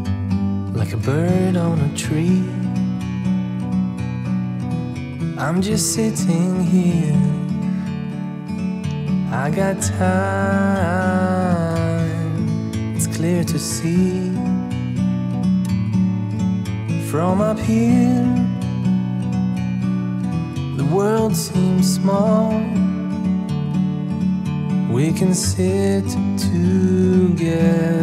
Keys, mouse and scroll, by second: 5.8-6.2 scroll down 5, 6.6-6.9 scroll up 3, 7.0 Tab, 7.6 scroll up 1, 7.9-8.3 scroll down 1, 8.3 click, 10.5-11.6 right drag, 11.6-12.2 scroll down 6, 12.2 click, 12.4-12.9 scroll up 6, 13.2 scroll down 5, 13.5-13.9 middle drag, 14.1 scroll up 2, 15.1 click, 15.7 Tab, 16.0 click, 16.8 3, 17.0 click, 17.3-18.2 scroll up 4, 18.6 i, 20.4 middle click, 20.8 e, 22.7 e.